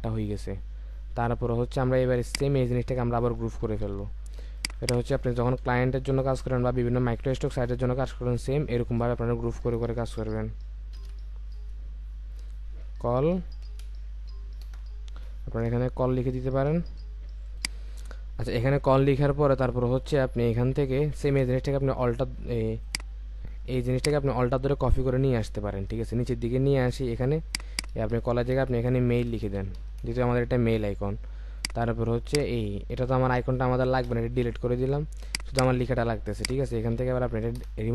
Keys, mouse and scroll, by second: 2.3 shift+click, 3.8 ctrl+g, 4.8 double click, 11.0 typing, 12.7-13.7 typing, 14.6 Return, 24.0 alt+click, 27.7 double click, 29.3-29.8 typing, 30.0 Return, 34.0 Delete, 35.5 double click, 36.8 ctrl+a, 37.6 BackSpace.